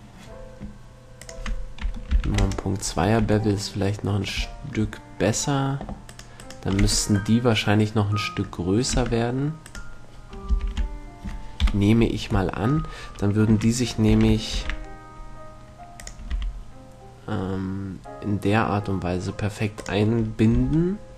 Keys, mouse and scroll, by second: 1.4-3.3 drag, 3.5 a, 3.8 middle click, 6.3-7.6 right drag, 7.1 Tab, 9.4 Tab, 10.8 ctrl+l, 12.0 KP_7, 14.4 s, 16.4-18.0 drag, 16.6 r, 20.2-21.1 drag, 20.8 g.